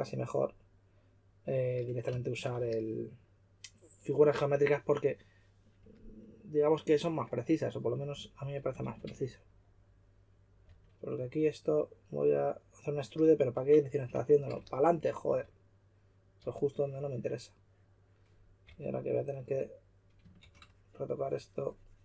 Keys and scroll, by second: 8.1 s, 8.8 shift+', 10.6 s, 15.2 typing, 16.3 typing, 18.6 typing.